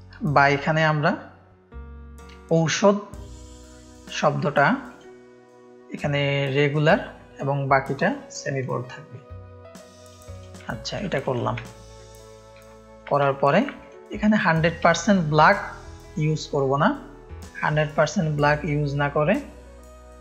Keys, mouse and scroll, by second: 4.8-8.7 drag, 9.1 click, 10.3 click, 10.6 ctrl+space, 10.6 ctrl+click, 11.2 click, 11.3 space, 11.6 ctrl+click, 12.7 ctrl+click, 13.2 ctrl+space, 13.2 ctrl+click, 14.1-15.1 drag, 14.9 space, 16.4-17.4 drag, 18.4-20.2 drag.